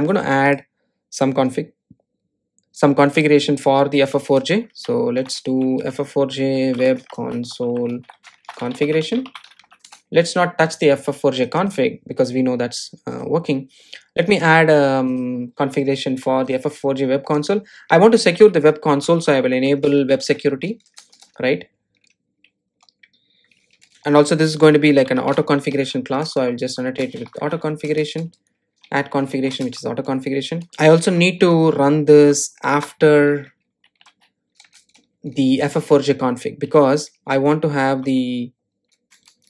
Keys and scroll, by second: 28.9 Return, 35.6 Return.